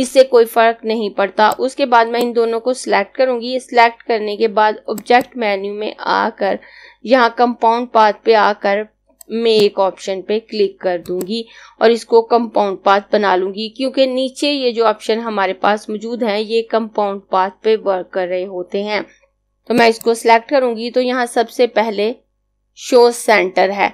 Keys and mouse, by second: 1.3 click, 4.7 click, 8.8 click, 19.8 click.